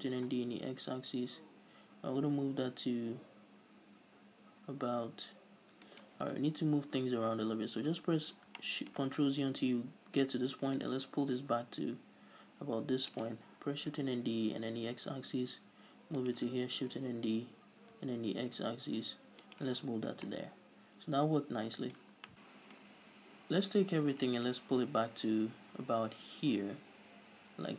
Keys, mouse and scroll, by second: 0.1 shift+d, 6.2 shift+right click, 6.5 ctrl+z, 8.8-11.0 shift+middle drag, 11.0-16.4 drag, 14.0 shift+d, 17.0 shift+d, 19.8 shift+click, 20.0 scroll up 1, 20.2 Tab, 20.4-24.8 middle drag, 23.3 a, 24.1-24.8 scroll up 2, 24.8-27.7 drag.